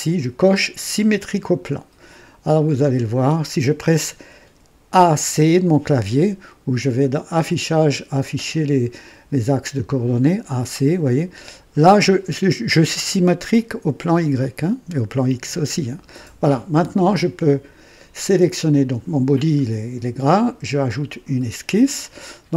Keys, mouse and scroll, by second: 0.9 click, 2.8 click, 4.9-5.2 typing, 7.2 click, 11.0 click, 20.9 click.